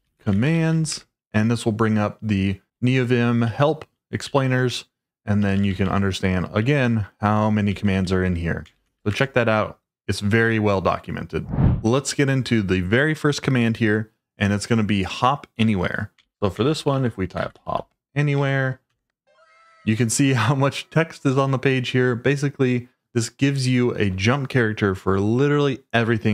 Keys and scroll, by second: 0.0-1.1 typing, 3.4 ctrl+d, 4.2 ctrl+d, 5.4-10.5 typing, 15.9-18.1 typing, 18.4 Tab.